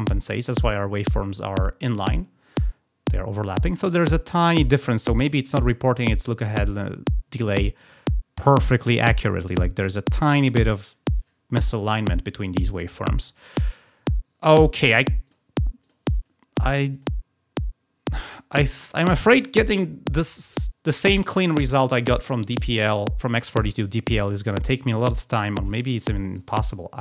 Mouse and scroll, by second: 15.2 click, 15.8 click, 16.9 click.